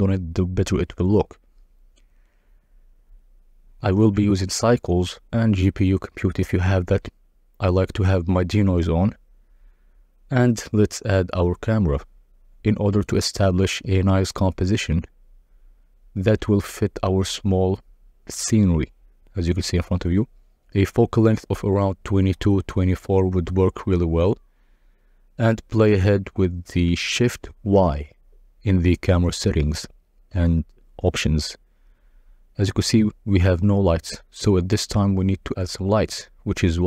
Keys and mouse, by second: 0.0-1.3 drag, 1.0 0, 2.8 click, 3.5 click, 5.0-5.6 drag, 6.2 click, 7.5 click, 8.3 click, 10.7 shift+a, 12.7 click, 13.2 click, 14.4 click, 14.8 click, 15.7 KP_0, 16.2 g, 16.4 c, 16.4 x, 17.5 g, 17.6 z, 18.7 shift+click, 19.5 click, 20.7-21.9 typing, 22.6 Return, 22.8 click, 23.1 2, 25.6 g, 26.0 x, 27.0-29.4 shift+middle drag, 30.0 middle click, 33.0 z, 33.7 ctrl+b.